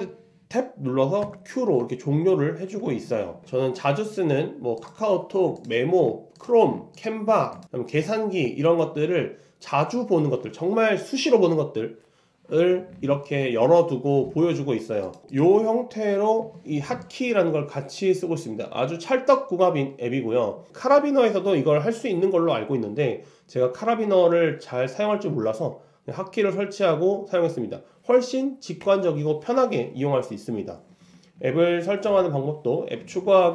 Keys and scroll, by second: 1.3 super+space.